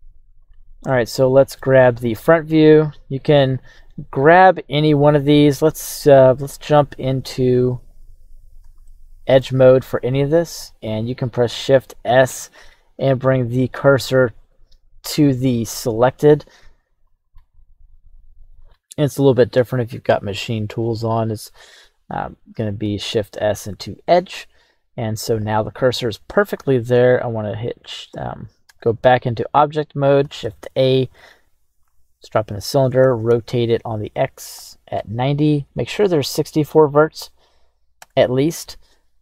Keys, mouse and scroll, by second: 0.4 ctrl+z, 0.4 scroll up 1, 0.8-1.6 middle drag, 1.7 KP_1, 3.0 click, 3.5 right click, 6.4 Tab, 7.9 right click, 8.8 shift+middle click, 11.3 shift+s, 22.3 right click, 22.6 shift+s, 28.7 Tab, 30.2 shift+a, 33.0 x, 33.3 r, 34.5 KP_9, 34.9 KP_9, 36.3 KP_0.